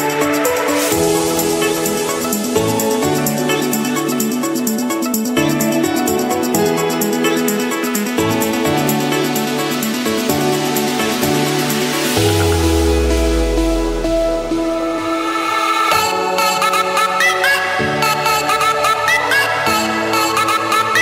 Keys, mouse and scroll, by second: 0.0-1.0 drag, 1.5-2.6 drag, 2.8 Escape, 4.0 s, 5.4 u, 6.4 Return, 7.6 click, 8.0 Return, 8.6 click, 9.3 click, 9.5 Return, 10.6 Escape, 10.8 Escape, 12.2 click, 13.2 click, 13.6-14.3 scroll, 14.3-16.5 scroll down 36, 16.5-18.5 scroll up 15, 18.5 click, 19.3 click, 20.3 click.